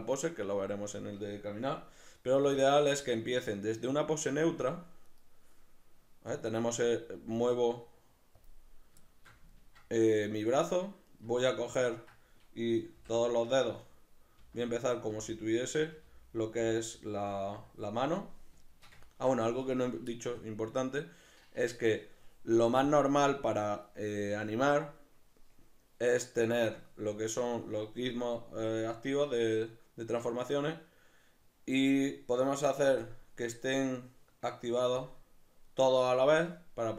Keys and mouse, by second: 2.4-4.5 middle drag, 2.4 g, 4.5 click, 5.1 right click, 6.3 right click, 7.1 g, 8.5 click, 9.1-11.1 shift+middle drag, 11.1 right click, 11.8-13.9 ctrl+middle drag, 13.0 l, 13.9 right click, 14.4 l, 18.7-22.9 shift+middle drag, 22.9-24.2 drag, 33.0-36.9 shift+drag.